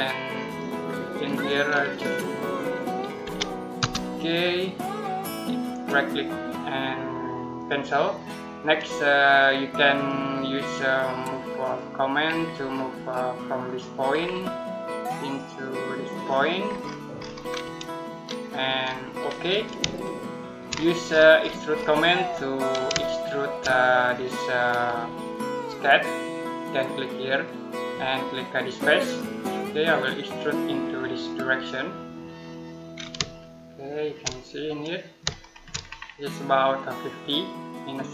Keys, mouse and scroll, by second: 0.3 click, 3.1 2, 3.6 Return, 5.5 right click, 7.4 click, 12.1-13.5 scroll down 1, 13.5 click, 13.9-14.8 scroll down 1, 14.8 click, 16.5 scroll down 1, 16.6-19.1 scroll up 1, 19.1 click, 19.8 shift+middle click, 20.5 scroll down 1, 20.9-21.3 scroll up 1, 21.3 middle click, 21.6-22.1 scroll up 1, 22.1 middle click, 22.8 shift+middle click, 27.1 click, 33.2 shift+middle click, 34.2 middle click, 35.5-36.5 shift+scroll down 2, 37.1 click.